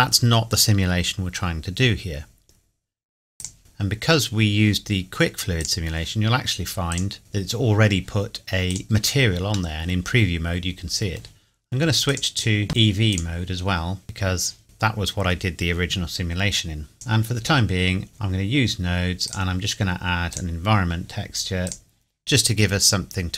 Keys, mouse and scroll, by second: 3.5 click, 5.6 click, 8.7 click, 8.8-9.3 scroll up 1, 9.3-9.7 scroll down 1, 9.7 middle click, 12.1 click, 14.2-14.6 scroll down 1, 14.6 middle click, 15.3-16.0 scroll down 1, 16.9 click.